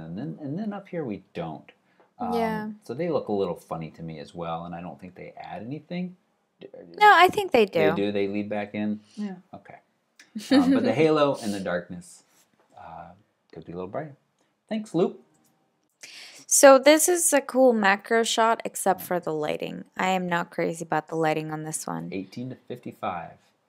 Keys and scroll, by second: 15.4 alt+super+Right.